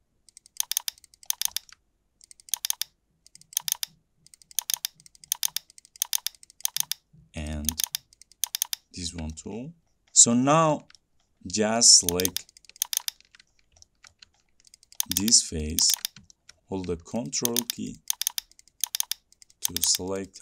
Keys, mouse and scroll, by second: 0.1 middle click, 0.7 click, 0.9 click, 1.4 click, 1.6 click, 2.0 shift+middle click, 2.0 shift+middle click, 2.0 shift+middle click, 2.6 click, 2.6 scroll, 2.8 click, 3.7 click, 3.9 click, 4.8 click, 4.9 click, 5.4 click, 5.6 click, 6.1 click, 6.3 click, 6.8 click, 7.0 click, 7.8 click, 8.0 click, 8.6 click, 8.8 click, 9.1 scroll, 9.6 middle click, 9.6-10.0 scroll down 4, 10.0 scroll up 6, 10.1 scroll down 1, 10.2 middle click, 10.4-10.7 scroll up 2, 10.7 scroll, 11.3 middle click, 11.5 middle click, 11.7 middle click, 12.2 click, 12.4 click, 12.9 ctrl+click, 13.1 ctrl+click, 13.8 middle click, 14.4 middle click, 14.7 ctrl+middle click, 14.8 ctrl+middle click, 15.1 ctrl+click, 15.3 ctrl+click, 15.8 ctrl+click, 16.0 ctrl+click, 16.0 ctrl+scroll, 16.5 middle click, 16.6 middle click, 17.5 ctrl+click, 17.7 ctrl+click, 18.2 ctrl+click, 18.5 ctrl+click, 19.0 ctrl+click, 19.1 ctrl+click.